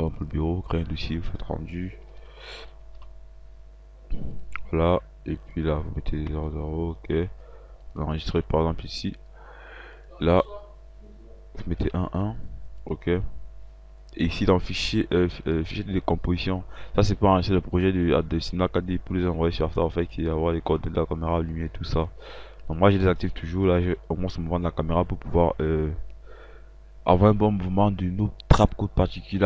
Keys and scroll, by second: 6.6 KP_0, 12.2 1, 12.8 1.